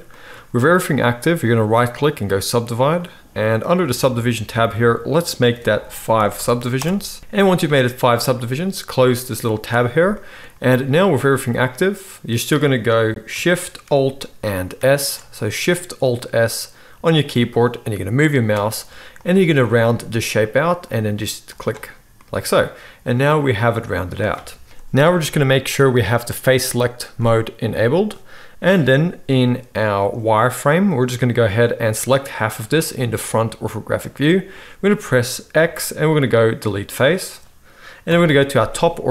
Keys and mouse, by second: 1.7-4.1 middle drag, 1.7-4.1 right drag, 4.3 click, 4.3 middle click, 4.3 right click, 9.6 click, 9.6-21.6 middle drag, 9.6 right click, 14.8 alt+shift+s, 21.6-24.7 right drag, 24.7-29.3 middle drag, 29.3 z, 35.5 x, 38.0 KP_7.